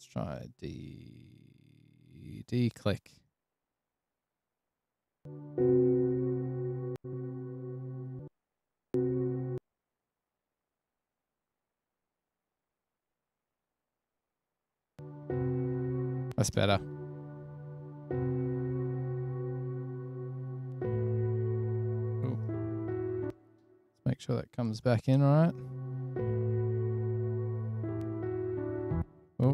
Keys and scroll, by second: 15.2 space, 16.5 space, 16.8 space, 20.1 super+[, 20.4 super+[, 20.8 super+[, 22.8 super+\, 23.0 super+], 23.1 super+], 25.1 f, 25.4 space, 26.3 F8, 27.9 F7, 29.2 super+=.